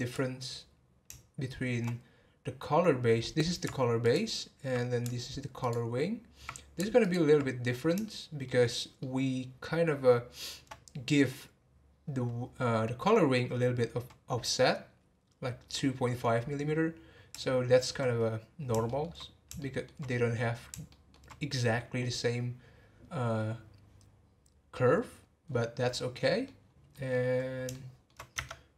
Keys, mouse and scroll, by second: 4.0 alt+click, 5.6 alt+click, 7.0 alt+click, 7.6-8.0 scroll down 1, 8.0-12.0 shift+middle drag, 17.3-18.4 shift+middle drag, 18.4-18.8 scroll down 1, 18.8-20.3 shift+middle drag, 20.3 scroll down 1, 20.8-23.9 shift+middle drag, 25.1 scroll down 1, 25.4-25.9 scroll up 3, 25.9 scroll down 2, 26.2 middle click, 26.6 scroll down 1, 26.9-28.4 middle drag, 28.4 Tab.